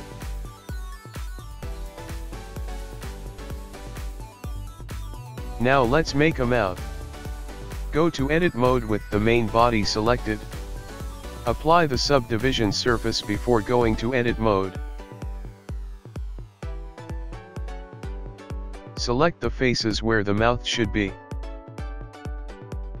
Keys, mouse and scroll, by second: 3.2 click, 4.2 Tab, 4.8-5.9 scroll up 3, 5.9 middle click, 7.2 KP_1, 8.1 scroll down 3, 8.7 scroll up 1, 9.8 shift+middle click, 11.1 click, 11.3 click, 11.6 click, 11.7 click, 12.0 Tab, 12.5 Tab, 13.0 ctrl+t, 14.1 ctrl+r, 16.2 Escape, 16.3 click, 16.7 ctrl+z, 16.8 ctrl+z, 17.2 Tab, 17.5 click, 17.9 Tab, 18.1-18.4 scroll up 3, 18.4 scroll down 2, 19.0 click, 19.3-20.0 scroll up 4, 20.1 shift+middle click, 20.4 scroll up 2, 21.9 click, 22.5 click, 22.8 click, 22.9 shift+click.